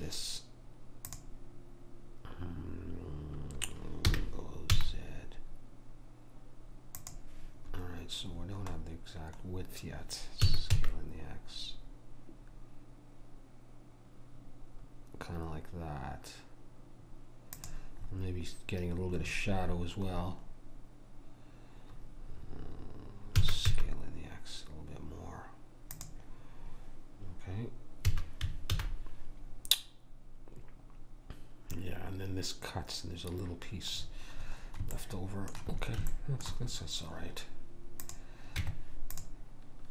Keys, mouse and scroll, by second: 4.1 g, 7.8-8.4 scroll up 1, 8.4 scroll down 1, 10.4 s, 23.4 s, 28.1 a, 28.7 alt+h, 34.0-38.1 middle drag, 38.1 click, 38.6 Tab.